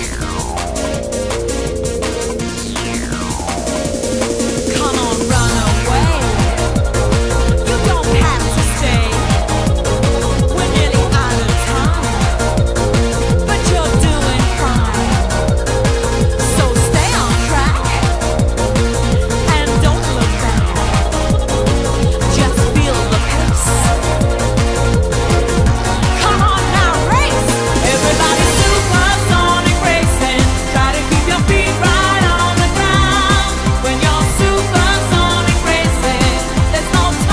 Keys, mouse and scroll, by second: 0.4 middle click, 1.0 right click, 1.8 right click, 3.0 right click, 3.6 middle click, 4.0 right click, 5.3 click, 6.8 middle click, 7.9 shift+right click, 8.5 right click, 9.3 ctrl+right click, 9.8 shift+right click, 10.6 right click, 11.1 middle click, 14.7 click, 16.6 right click, 17.2 middle click, 18.0 ctrl+right click, 18.6 right click, 19.3 middle click, 19.8 right click, 20.8 middle click, 20.8 right click, 21.2 middle click, 21.5 right click, 22.1 middle click, 23.0 middle click, 23.1 right click, 23.6 click, 23.9 ctrl+right click, 24.0 shift+right click, 24.2 right click, 24.5 middle click, 25.7 middle click, 26.4 right click, 27.8 middle click, 28.2 right click, 28.4 ctrl+right click, 28.7 shift+right click, 28.9 right click, 29.1 middle click, 29.3 right click, 29.7 click, 30.4 click, 30.5 middle click, 30.7 right click, 30.9 ctrl+right click, 31.1 shift+right click, 31.3 right click, 31.5 middle click, 32.0 ctrl+right click, 32.2 right click, 32.6 click, 33.1 middle click, 33.3 right click, 33.5 ctrl+right click, 33.7 shift+right click, 33.9 right click, 34.0 middle click, 34.6 right click, 34.6 click, 35.0 click, 36.0 right click, 36.0 middle click, 36.3 right click, 36.3 middle click, 36.5 right click, 36.7 ctrl+right click, 37.0 right click.